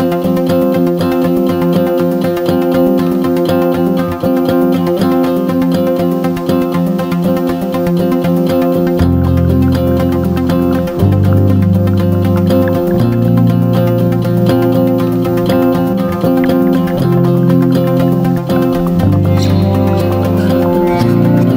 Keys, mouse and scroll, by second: 2.6 ctrl+g, 3.7-5.4 drag, 5.9 Down, 6.2 Down, 6.4 Down, 6.7 Down, 12.7 click.